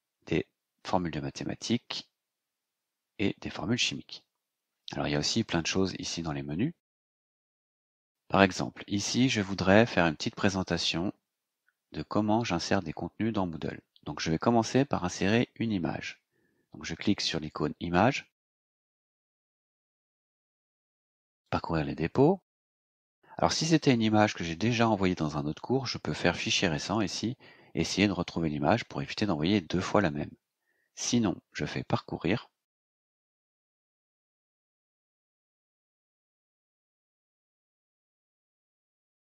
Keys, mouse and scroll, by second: 5.2 click, 18.9 click, 21.4 click, 33.1 click, 37.9 click, 39.2 click.